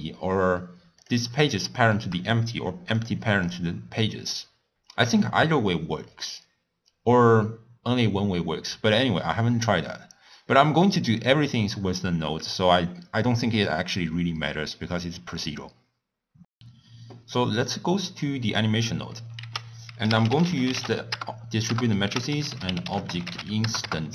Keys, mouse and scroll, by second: 1.0 click, 1.7 shift+click, 3.5 click, 15.0-16.3 scroll down 1, 17.6 click, 21.3 ctrl+a, 23.8 ctrl+a.